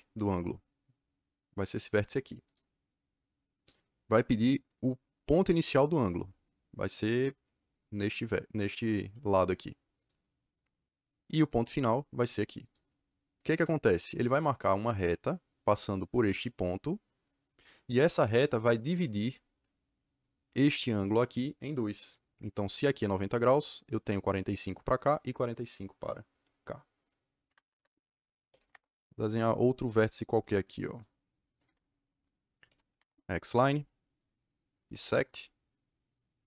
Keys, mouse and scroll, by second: 2.4 click, 9.9 click, 12.5 click, 13.5 KP_Enter, 27.4 Escape, 28.2-29.0 typing, 29.7 click, 30.2 click, 30.8 click, 31.6 KP_Enter, 32.3-33.3 typing, 34.8 b, 35.0 KP_Enter.